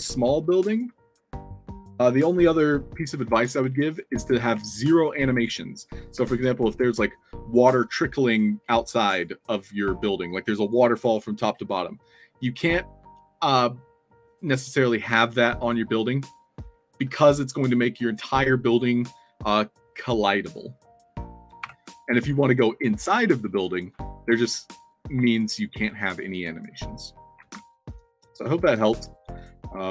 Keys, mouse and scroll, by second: 0.8 w, 3.6-4.4 alt+drag, 22.1 w, 23.8 click, 24.3-25.0 alt+drag, 26.9 alt+drag, 27.1-28.7 typing, 28.5 click, 29.0-29.4 alt+drag.